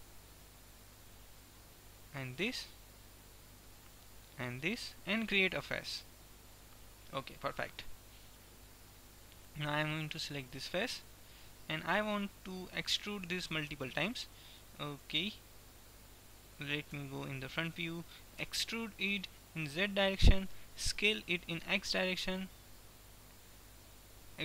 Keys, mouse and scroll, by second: 2.4 middle click, 2.9 middle click, 3.6 middle click, 6.3 f, 6.6 middle click, 10.6-11.8 drag, 11.3 right click, 11.8-12.8 middle drag, 13.9 e, 16.9 KP_1, 18.6 e, 21.3 s.